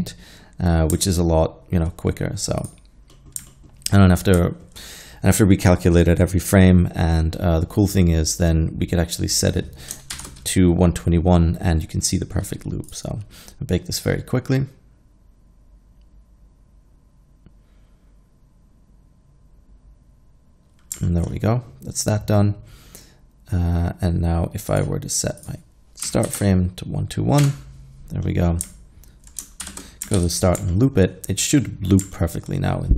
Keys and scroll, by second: 10.2 shift+Left, 26.1 1, 26.3 2, 26.4 1, 27.4 Return, 29.7 shift+Left, 30.2 alt+a.